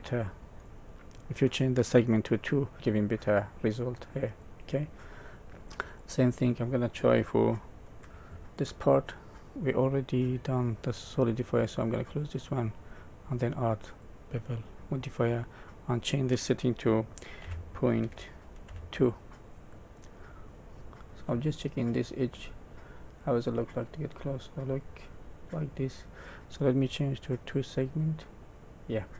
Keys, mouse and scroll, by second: 2.7 middle click, 2.8 middle click, 4.6-5.4 scroll down 5, 5.4 middle click, 5.8 click, 8.0 KP_Decimal, 8.6 middle click, 9.5 click, 11.7 click, 12.4 click, 15.8 click, 19.7 middle click, 20.7 scroll up 4.